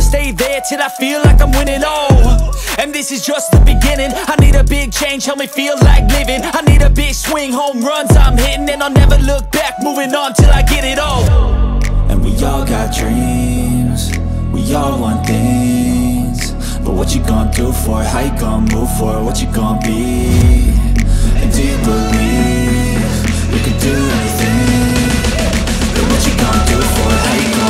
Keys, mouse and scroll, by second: 0.9 click, 1.1-2.2 right drag, 2.5-2.9 scroll up 2, 2.9 middle click, 3.3 Tab, 4.0 middle click, 4.7 scroll up 1, 5.0 middle click, 6.1 shift+middle click, 6.9 middle click, 7.5 Tab, 8.0 Tab, 9.2 3, 9.5 click, 10.6 click, 12.1 shift+click, 12.8 shift+click, 13.5 shift+click, 14.1 shift+click, 14.6 shift+click, 15.2 shift+click, 15.8 shift+click, 17.4 shift+click, 18.9-19.7 scroll down 1, 19.7-20.1 scroll up 1, 21.3 shift+click, 22.1 shift+click, 22.6 shift+click, 23.8 shift+click, 24.2 shift+click, 24.7 shift+click, 25.1 shift+click, 26.2 shift+click, 27.3 shift+click.